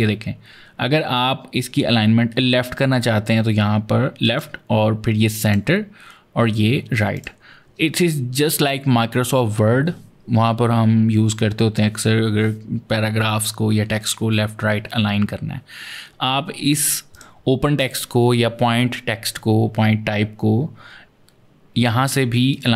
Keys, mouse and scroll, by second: 4.0 click, 5.3 click, 7.0 click, 16.9 click, 22.3 click.